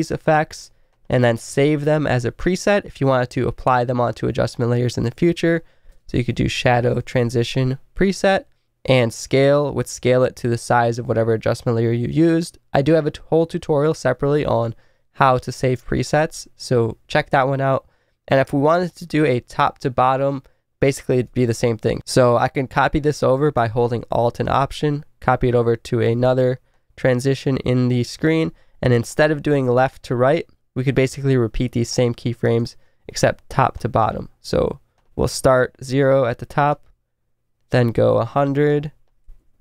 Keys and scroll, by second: 5.5-7.9 typing, 39.3 Right.